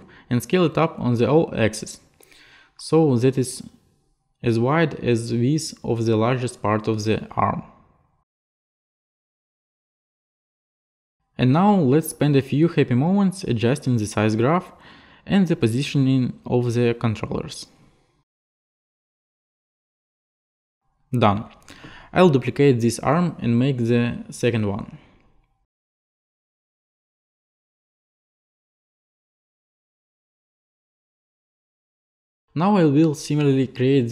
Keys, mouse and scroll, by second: 0.5 click, 2.0 click, 8.7 click, 9.5 click, 11.2 click, 11.2 click, 11.4 click, 11.5 click, 11.7 click, 11.8 click, 12.1 click, 13.0 click, 13.9 click, 14.1 e, 14.3 right click, 14.5 right click, 14.8 right click, 15.3 right click, 15.6 right click, 15.7 right click, 15.9 click, 16.0 click, 16.3 click, 16.6 scroll, 17.5 alt+click, 18.4 click, 18.5 click, 18.5 click, 18.7 click, 18.8 scroll down 1, 18.9-20.0 typing, 19.7 Left, 19.7 Left, 19.8 ctrl+v, 19.9 Right, 20.1 ctrl+v, 20.4 shift+middle click, 20.5 click, 20.5 click, 20.7 click, 20.9 click, 22.7 click, 23.7 click, 24.1 click, 25.7 ctrl+click, 26.9 click, 27.5 middle click, 28.2 click, 29.0 middle click, 30.3 click, 30.9 alt+click, 31.6 alt+middle click, 31.8 ctrl+middle click, 32.2 click, 32.9 ctrl+click, 33.5 click.